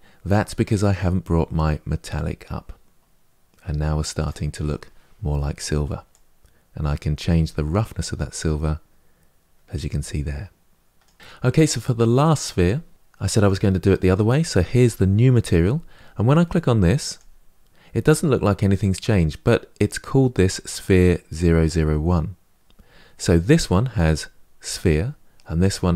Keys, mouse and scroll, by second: 12.0 click, 16.9-23.8 drag, 25.5 click.